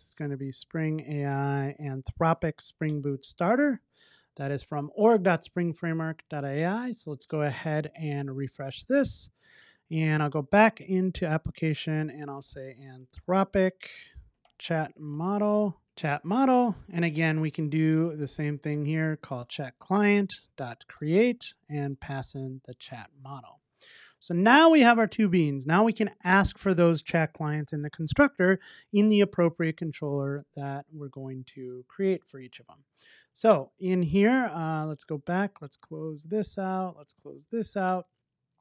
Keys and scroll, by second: 2.9 Return, 5.2 super+s, 8.7 shift+super+i, 15.8 Return, 19.8 Return, 22.0 Return, 23.4 super+s.